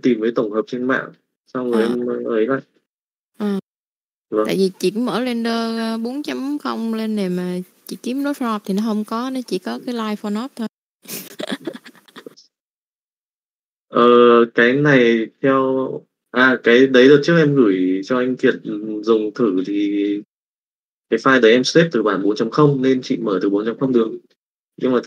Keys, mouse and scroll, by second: 0.6 click, 1.9 click, 3.0-4.0 drag, 4.3 click, 5.2 click, 6.2 click, 7.7-9.9 drag, 11.0 click, 12.5 click, 13.0 Tab, 14.0-15.9 drag.